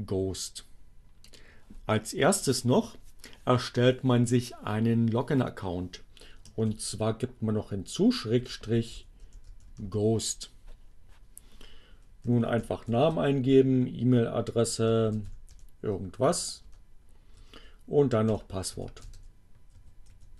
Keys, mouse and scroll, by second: 1.1 click, 6.0 shift+7, 8.2-10.1 typing, 11.3 p, 12.3-13.7 typing, 14.9-15.8 typing, 16.6 Return, 17.0 Tab, 17.4 p, 18.5-19.9 typing.